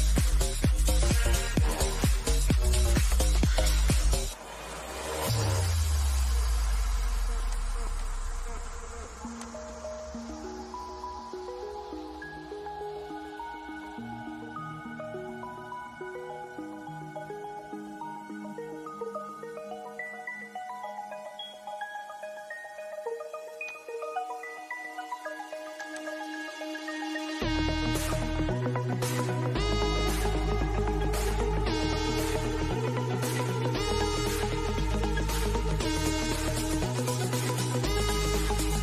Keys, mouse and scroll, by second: 0.9-5.4 drag, 9.5 scroll down 1, 12.3-13.9 middle drag, 13.9-14.2 scroll down 1, 14.2-16.5 middle drag, 16.5 scroll down 1, 16.7 middle click, 17.3 shift+middle click, 18.5-19.1 scroll up 1, 19.3 middle click, 20.1 scroll down 1, 20.3-22.9 middle drag, 22.9 click, 25.0 click, 27.0-27.5 scroll down 1, 28.1 middle click, 28.9 scroll up 1, 29.7 middle click, 30.5 scroll up 1, 34.4 scroll down 1, 35.0 middle click, 35.0 middle click, 35.8 scroll down 1, 36.7 click, 38.4 scroll up 1.